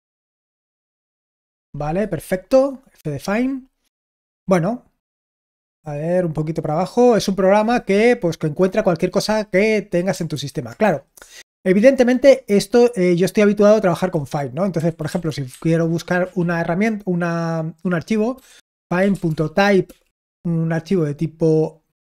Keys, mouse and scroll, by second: 0.8 h, 4.2 d, 5.7 d, 10.2 super+h, 14.0-16.1 typing, 18.2-20.0 typing.